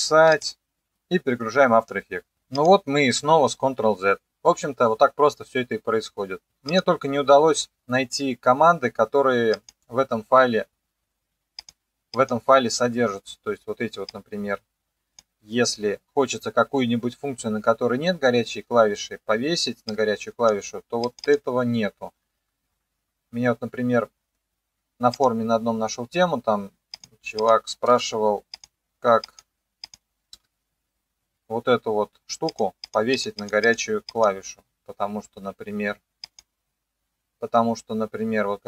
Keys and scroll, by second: 27.9 Return, 30.4 Return.